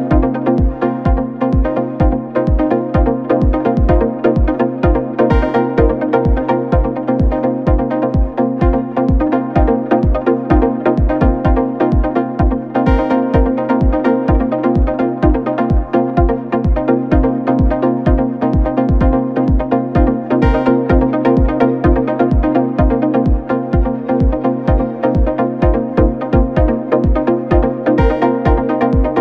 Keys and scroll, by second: 1.6 3, 4.2 4, 7.4 9, 7.4 Return, 7.9 9, 7.9 Return, 9.2 F1, 9.4 F2, 14.0 ctrl+d, 14.1 Escape, 15.1 ctrl+z, 17.1 ctrl+z, 24.4 3, 25.0 ], 25.8 4, 27.8 3, 29.1 Delete.